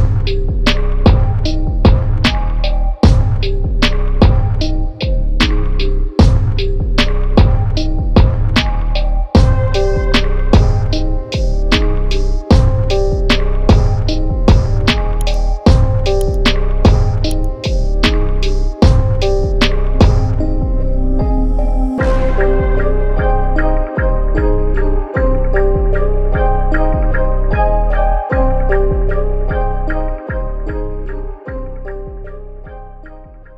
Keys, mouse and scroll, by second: 2.2 right click, 5.4 click, 7.5 click, 11.0 click, 17.7 click.